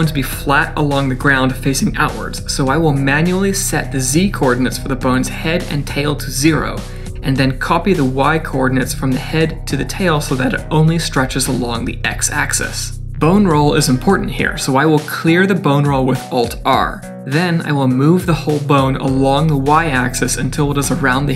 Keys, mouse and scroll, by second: 4.1 click, 6.2 click, 8.9 ctrl+c, 9.7 ctrl+v, 15.4 middle click, 16.5 alt+r, 21.0 KP_3.